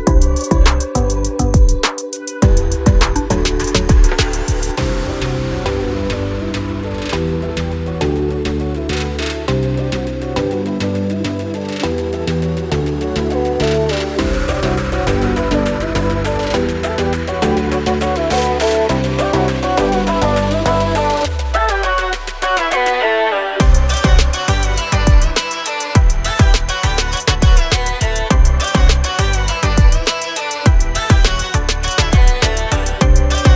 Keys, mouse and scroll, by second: 1.3 click, 2.3 shift+a, 4.2 click, 8.4 scroll down 1, 8.9 shift+click, 10.5 click, 11.4 scroll up 1, 12.3 click, 16.0 click, 16.4-16.8 scroll up 1, 17.1 ctrl+click, 19.5 F8, 19.5 click, 20.0 d, 22.2 ctrl+z, 23.5 click, 27.3-27.9 scroll down 1, 28.9 click, 30.0 click.